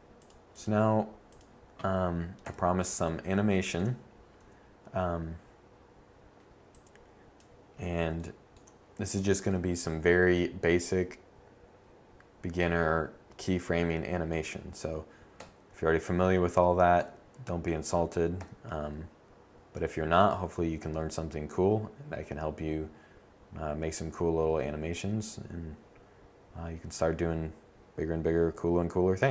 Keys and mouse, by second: 0.1-1.7 drag, 2.3 KP_7, 4.3 a, 15.3 KP_1, 16.4 z, 16.8 z, 17.2 a, 18.2 KP_7.